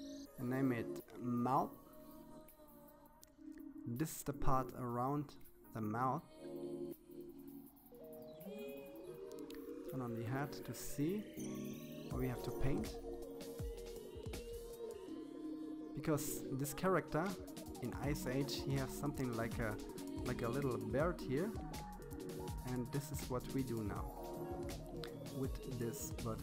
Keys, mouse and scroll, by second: 4.7 KP_1, 5.3-6.0 scroll up 6, 6.0-8.1 shift+middle drag, 8.1 click, 9.3-11.5 scroll up 5.